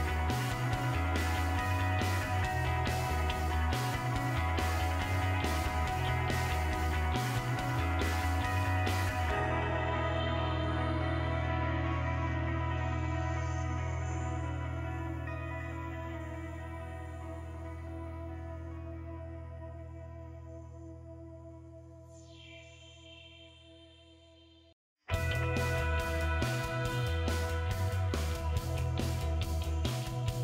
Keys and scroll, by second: 0.0-0.4 typing, 5.4-6.2 typing, 7.4 BackSpace, 9.4 typing, 11.3-14.4 typing, 17.0 5, 18.0 BackSpace, 18.9 8, 20.3 BackSpace, 22.0 BackSpace, 22.3 2, 23.1 BackSpace, 23.3 BackSpace, 24.5 2.